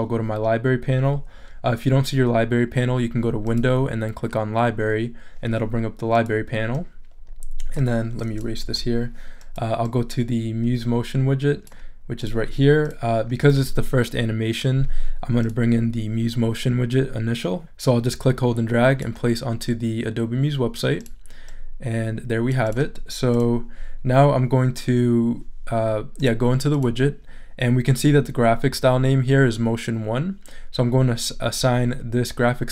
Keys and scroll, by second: 8.6 BackSpace.